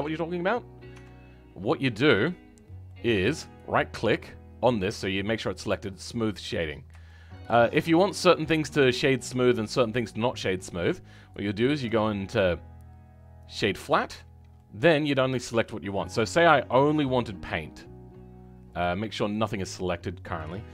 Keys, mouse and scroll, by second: 0.9 Tab, 2.8-4.8 middle drag, 4.8 click, 7.0-13.5 shift+middle drag, 13.5 right click, 14.0 Tab, 14.5-16.6 middle drag, 16.6-18.7 drag.